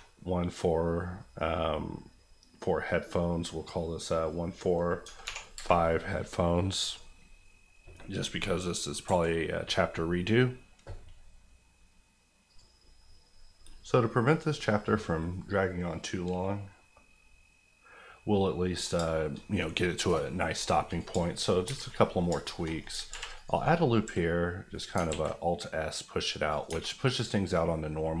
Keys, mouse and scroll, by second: 5.2 5, 5.6 Return, 6.8 click, 7.9 middle click, 9.0 KP_1, 12.5 click, 15.5-18.3 scroll up 1, 18.3 middle click, 18.9 shift+middle click, 19.4 middle click, 20.9 click, 21.1 shift+click, 21.2 shift+middle click, 21.5 shift+scroll up 1, 21.6 Tab, 21.8 middle click, 22.3 shift+middle click, 22.6-23.1 shift+scroll up 3, 23.1 ctrl+r, 23.3 click, 23.5 right click, 24.0 s, 24.7 right click, 24.9 alt+right click, 25.1 alt+s, 26.5 click, 26.7 Tab, 26.8-28.2 middle drag.